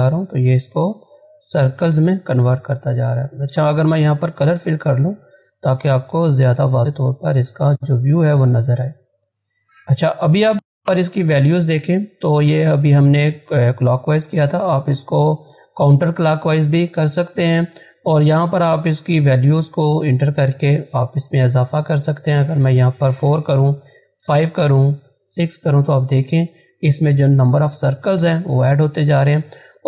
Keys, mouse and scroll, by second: 24.6 click.